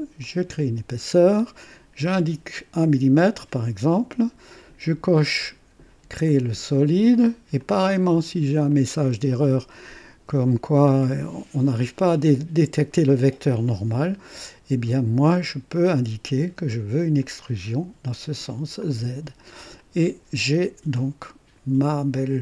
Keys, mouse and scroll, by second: 0.2 click, 2.0 KP_1, 4.2-4.9 drag, 6.2 click, 7.6-8.3 drag, 8.7 click, 15.9 click, 17.2 click, 18.8 click, 19.8 click, 21.0 click, 22.1 click.